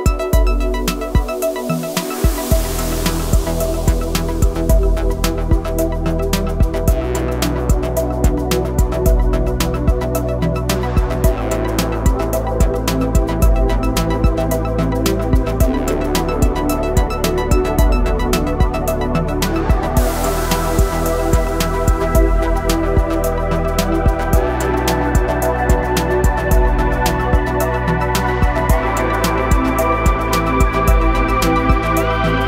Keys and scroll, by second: 4.9 shift+a, 11.3 1, 12.6 Return, 19.5 Tab, 20.9 s, 25.1 g, 29.1 s.